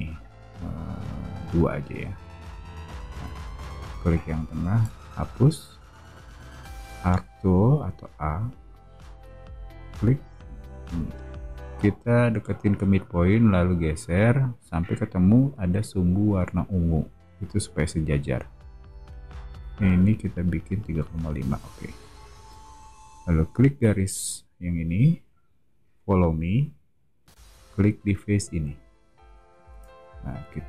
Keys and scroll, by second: 1.9 2, 2.3 Return, 3.0 space, 4.8 BackSpace, 7.1 a, 22.3 space, 29.6 space.